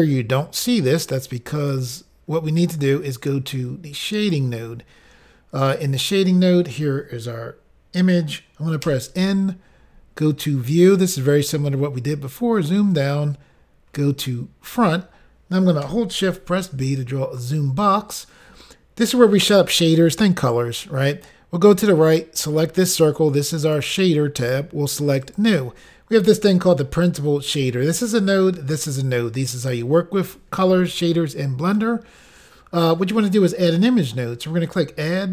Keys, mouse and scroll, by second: 1.6 click, 4.2 click, 5.9-7.1 scroll up 3, 10.8 click, 10.9 click, 11.5-12.9 scroll down 2, 12.9-14.6 scroll down 4, 13.0 click, 14.6 click, 14.7 click, 16.9 click, 16.9 b, 23.6 click, 23.8 click, 25.4 click, 34.7 click, 34.8 click.